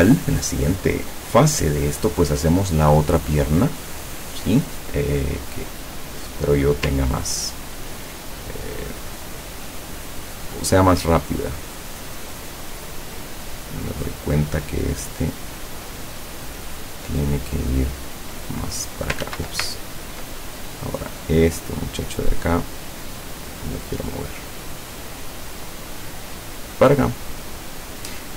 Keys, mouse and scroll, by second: 7.2-7.8 ctrl+scroll up 2, 8.8 click, 9.4 click, 10.6-12.3 drag, 12.4 click, 13.1-14.7 drag, 15.2 click, 16.5 click, 17.7 click, 18.3 click, 19.3 ctrl+z, 19.8-20.3 ctrl+scroll up 2, 20.5 ctrl+click, 21.0 ctrl+click, 22.0 click, 23.3 click, 24.1-27.1 drag, 27.8 click.